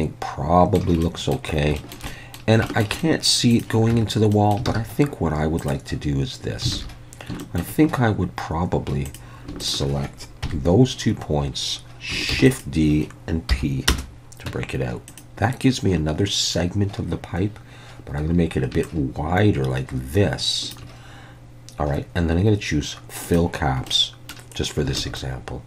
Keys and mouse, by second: 1.0-1.4 middle drag, 1.8 shift+middle drag, 2.1 middle drag, 2.7 shift+middle drag, 3.0 middle drag, 3.9 Tab, 4.3 middle click, 4.7 alt+a, 5.6 click, 6.8 alt+a, 7.4 shift+middle click, 10.5 KP_3, 12.3 shift+d, 12.5 click, 13.5 p, 14.5 Tab, 15.2 drag, 23.3 click, 23.9-24.3 middle drag, 25.0 alt+a, 25.2-25.6 middle drag.